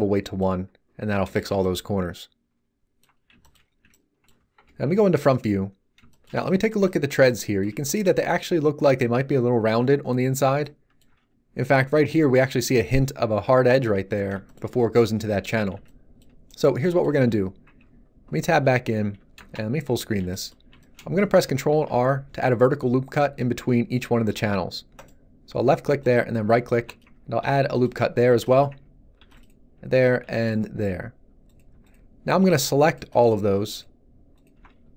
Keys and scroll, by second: 0.9 Tab, 4.6 1, 17.6 Tab, 19.3 shift+space, 21.7 ctrl+r, 27.4 ctrl+r.